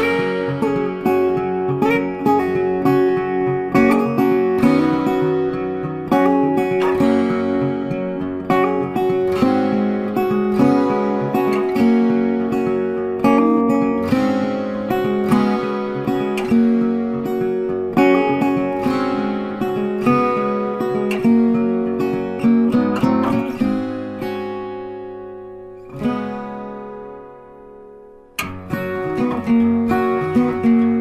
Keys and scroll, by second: 23.2 Delete, 24.6 ctrl+d.